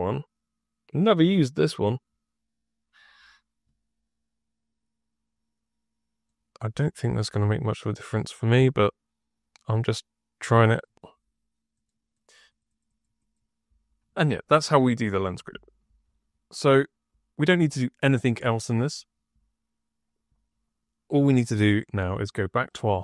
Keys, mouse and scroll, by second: 1.8 click, 2.9 click, 6.2 click, 7.7 click, 10.6 click, 11.7 click, 12.0 click, 12.2 click, 12.4 click, 12.6 click, 12.8 click, 13.1 click, 22.5 click, 22.8 click.